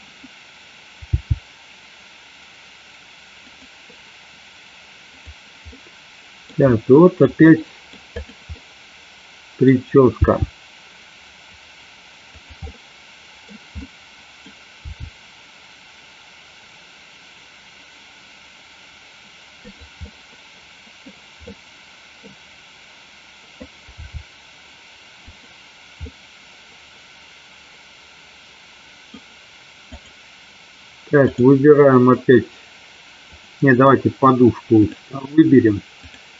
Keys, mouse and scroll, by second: 1.2 g, 3.6 click, 5.3 click, 8.7-9.8 middle drag, 10.3 g, 12.5 click, 12.8 middle click, 13.9 middle click, 14.9 g, 20.0 middle click, 21.5-22.4 middle drag, 24.0 g, 25.3 click, 26.2-29.1 middle drag, 29.9 click, 31.4 click, 35.1-36.3 drag.